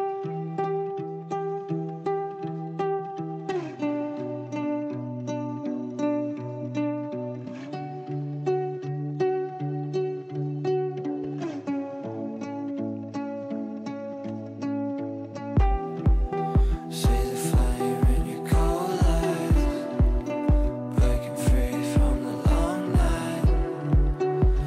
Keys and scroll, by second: 1.4 Delete, 13.0 w, 14.2 w, 15.1 d, 16.6 f, 17.6 w, 18.8 w.